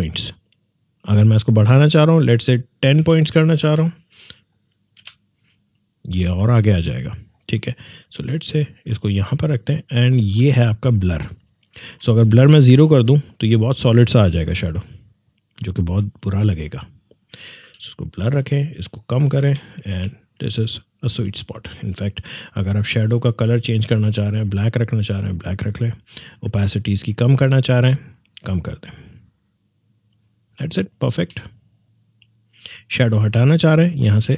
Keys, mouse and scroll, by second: 3.0-3.6 typing, 5.0 Return, 8.0-12.6 drag, 12.6 0, 13.4 click, 17.6 6, 18.4 click, 19.3 3, 20.8-25.4 drag, 27.3 click, 30.9-31.2 alt+scroll down 2, 32.6 click.